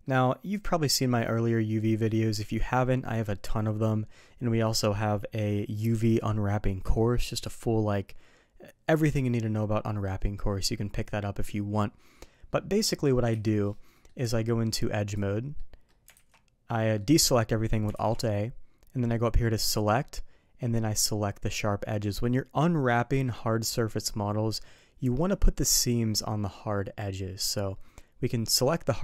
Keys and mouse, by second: 0.0 middle click, 0.9 middle click, 2.4 z, 12.8 middle drag, 13.3 z, 13.9 middle click, 14.2 Tab, 15.5 middle click, 16.1 alt+a, 16.8 middle click, 19.5-29.0 drag.